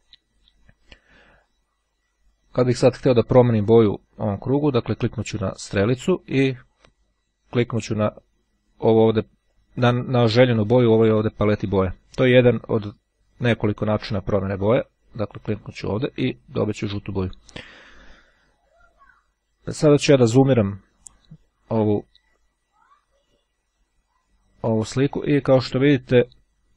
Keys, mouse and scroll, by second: 3.2 click, 4.9 click, 15.6 click, 22.5-23.6 ctrl+scroll up 3, 24.1-24.7 ctrl+scroll up 2, 24.7-26.6 ctrl+scroll up 1.